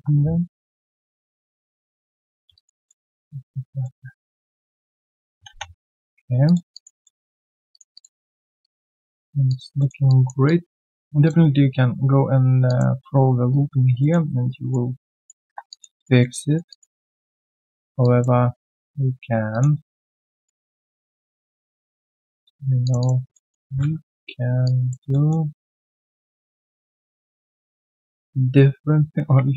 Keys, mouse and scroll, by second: 1.7-2.4 typing, 1.9 middle click, 2.5 alt+click, 2.8 alt+middle click, 3.1 alt+click, 3.8 alt+middle click, 4.1 alt+click, 4.4 alt+middle click, 4.9 alt+click, 5.9 right click, 6.7 alt+click, 7.0 alt+middle click, 7.2 alt+click, 7.9 alt+click, 8.2 alt+middle click, 8.4 alt+right click, 8.6 alt+click, 8.9 alt+middle click, 9.4 alt+click, 9.7 alt+middle click, 10.0 alt+click, 10.9 alt+middle click, 11.2 alt+click, 12.6 alt+click, 14.0 alt+middle click, 14.3 q, 14.4 right click, 14.9 alt+middle click, 15.1 alt+right click, 15.4 1, 15.7 alt+click, 15.9 alt+right click, 16.2 alt+middle click, 16.4 alt+right click, 16.7 alt+click, 17.0 alt+middle click, 17.2 alt+click, 17.7 alt+middle click, 18.0 alt+click, 18.7-19.5 alt+scroll down 1, 19.5 alt+click, 19.8 alt+middle click, 20.1 alt+click, 20.7 right click, 21.7 double click, 22.8 shift+click, 23.0 shift+double click, 23.3 alt+double middle click, 23.8 r, 25.1 alt+middle click.